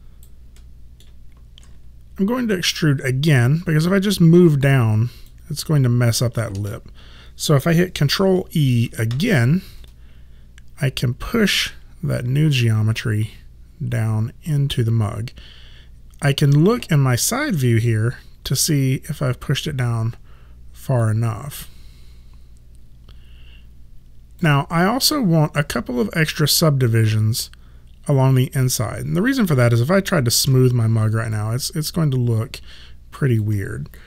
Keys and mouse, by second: 0.7 middle click, 4.2 click, 6.6 ctrl+z, 9.2 ctrl+e, 11.3 click, 19.1 click, 21.6 alt+click, 30.5 3, 31.4 alt+click.